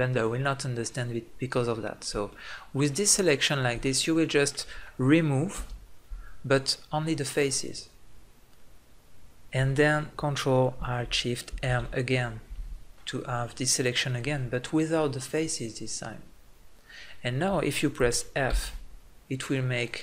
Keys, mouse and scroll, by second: 0.4 middle click, 5.7 Delete, 14.7-15.7 ctrl+alt+shift+middle drag.